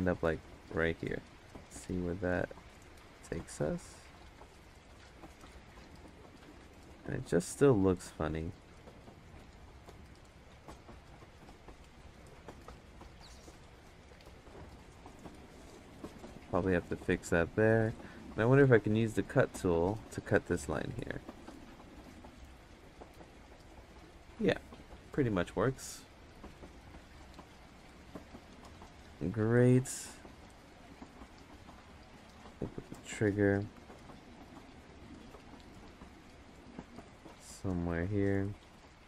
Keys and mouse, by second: 1.4-3.2 drag, 4.0-5.6 drag, 6.3 ctrl+z, 7.4-8.8 drag, 9.0 ctrl+z, 9.7-11.9 drag, 20.5 click, 21.9 click, 25.8 click, 29.2-30.5 drag, 31.1 click, 32.1 ctrl+z, 32.5-33.5 drag, 33.7 ctrl+z, 34.2-35.5 drag, 35.7 ctrl+z, 36.3 ctrl+z, 36.6-37.8 drag, 38.7 ctrl+z.